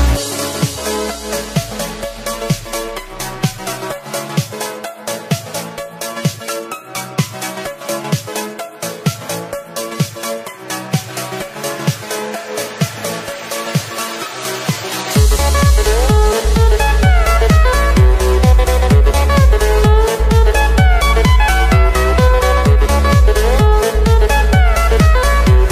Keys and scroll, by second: 9.7 space, 12.0 ctrl+z, 15.6 space, 18.0 space, 24.1 ctrl+-, 25.5 ctrl+-.